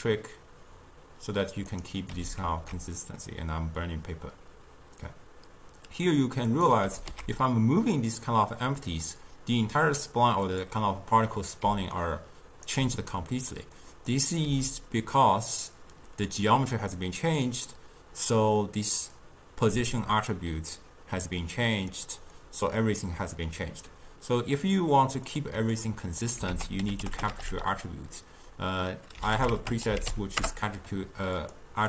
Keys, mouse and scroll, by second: 2.3 r, 7.0 g, 12.1 right click, 12.8 d, 13.9 click, 14.6 g, 15.9 click, 19.3-22.3 drag, 22.5-25.5 drag, 26.6 ctrl+a, 27.3 t.